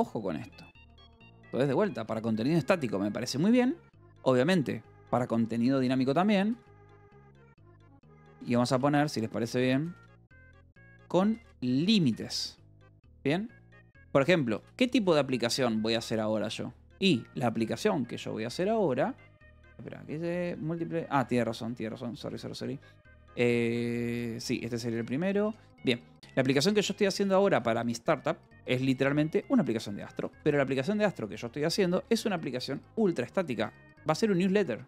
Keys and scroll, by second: 1.9-2.8 typing, 4.3 o, 5.5-12.2 typing, 14.0 Escape, 15.1 ctrl+s, 15.7 k, 17.4 j, 18.4 k, 19.8-22.3 typing, 22.2 Escape, 24.7 j, 25.4 k, 26.3 a, 27.4 Escape, 27.6 j, 29.4-32.2 typing, 29.8 Escape, 30.6 Escape, 33.8-34.8 typing.